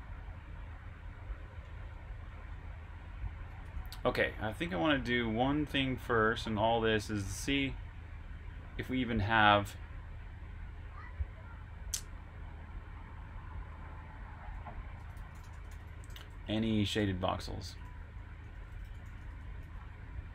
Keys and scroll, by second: 3.3-4.8 typing, 8.4-9.6 typing, 12.8-16.9 typing, 18.5-19.5 typing.